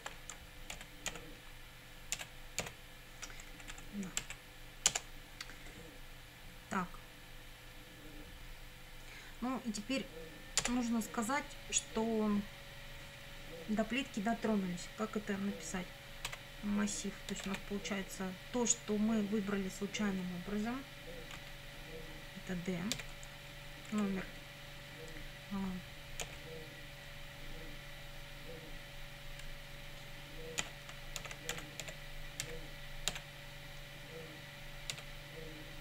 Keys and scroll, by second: 0.0 shift+/, 0.8 BackSpace, 1.1 ., 2.2 BackSpace, 2.6 ,, 3.7 Right, 4.9 Return, 10.6 Return, 16.3 a, 17.3 r, 21.4 [, 23.0 d, 23.9 Right, 26.2 ·, 29.5 BackSpace, 30.6-33.1 typing, 34.9 d.